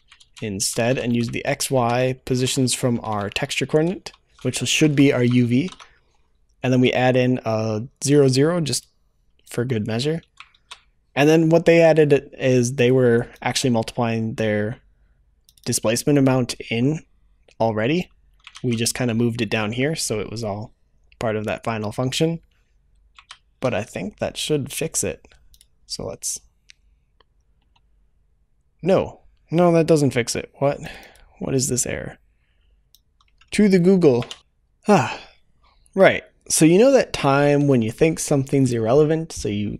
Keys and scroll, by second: 34.4 ctrl+s.